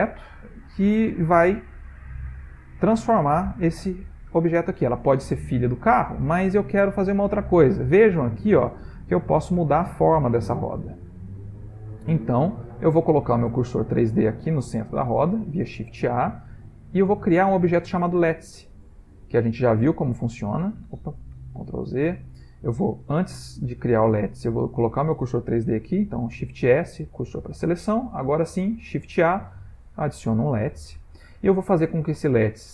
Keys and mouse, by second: 5.1 click, 6.5 middle click, 8.3 middle click, 10.7 shift+middle click, 11.2 shift+middle click, 11.6 shift+middle click, 11.7 middle click, 12.1 middle click, 12.2 middle click, 12.4 middle click, 12.5 shift+middle click, 13.1 middle click, 13.3 middle click, 14.5 middle click, 14.7 middle click, 15.9 shift+a, 20.2 middle click, 20.2 middle click, 21.8 ctrl+z, 23.7 middle click, 26.3 shift+s, 28.0 middle click, 28.8 shift+a, 30.7 middle click.